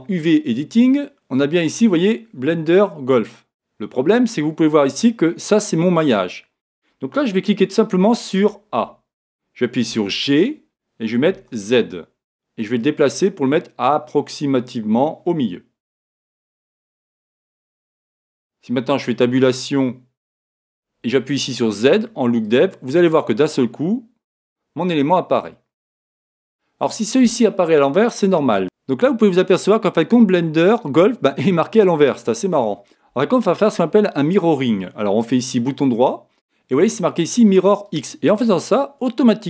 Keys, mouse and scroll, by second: 0.3 click, 8.4 a, 10.1 g, 18.7 Tab, 19.9 scroll up 1, 22.6 z, 23.3 middle click, 28.5 Tab, 28.6 middle click.